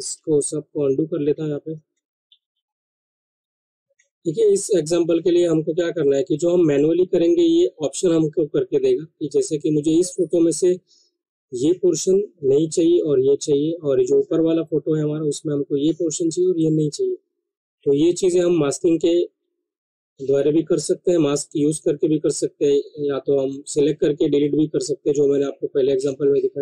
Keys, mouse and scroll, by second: 0.9 ctrl+z, 4.0 ctrl+d, 5.4 click, 6.7 click, 10.2 click, 14.0 click.